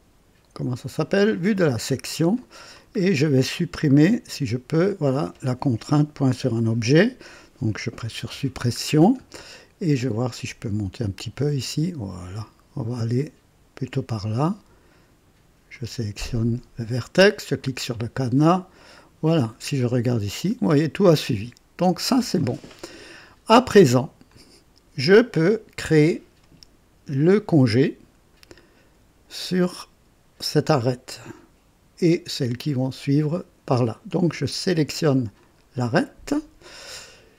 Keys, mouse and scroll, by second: 1.9-2.2 scroll up 2, 2.3-2.8 right drag, 3.0 scroll up 2, 4.8 click, 8.2 Delete, 8.8 scroll down 1, 11.1-14.2 drag, 15.7 click, 17.4 click, 18.7 click, 19.9-22.1 drag, 22.4 click, 23.5 right click, 24.3-25.6 drag, 27.7-28.5 drag, 35.3 click.